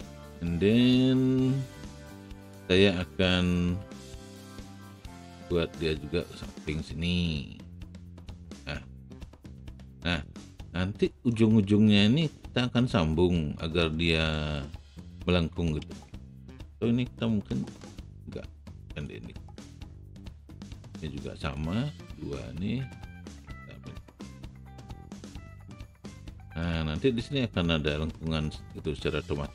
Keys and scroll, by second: 3.7 w, 17.3 r.